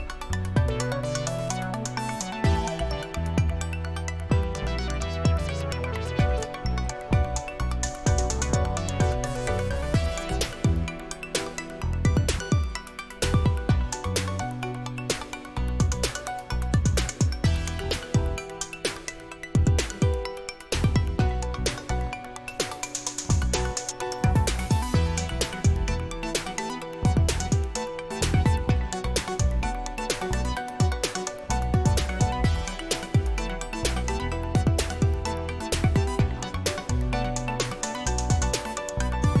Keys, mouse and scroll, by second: 0.0 click, 2.0 click, 4.8 click, 6.7 click, 9.6 click, 12.5 click, 14.8 click, 15.2 click, 19.5 click, 21.2 right click, 23.6 click, 27.0 click, 28.6 click, 33.3 click, 37.3 click.